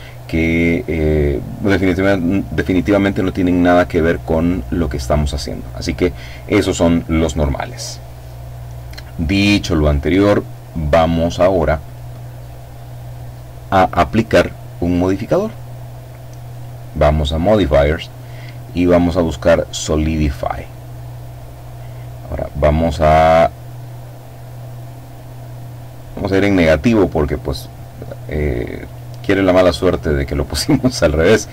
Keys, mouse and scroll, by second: 7.8 middle click, 7.9 click, 8.4 middle click, 9.2-10.2 scroll down 1, 10.4 middle click, 11.6 middle click, 16.2 click, 17.9 click, 19.9 click, 22.5-29.2 drag.